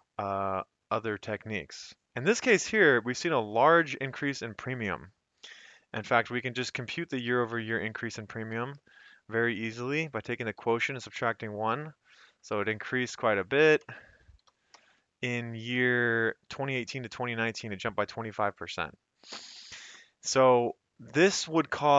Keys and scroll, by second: 7.2 =, 7.7 Left, 8.6 /, 8.9 Up, 9.1 Left, 10.4-11.5 typing, 12.2 ctrl+c, 12.5 shift+Down, 12.7 shift+Down, 13.0 shift+Down, 13.9 shift+Down, 14.0-15.2 typing, 15.7 Return, 17.1 Escape.